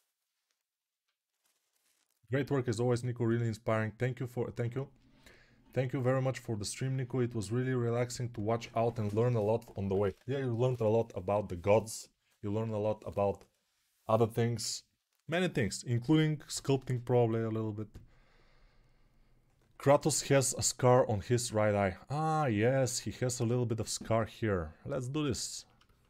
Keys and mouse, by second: 0.0-26.0 typing.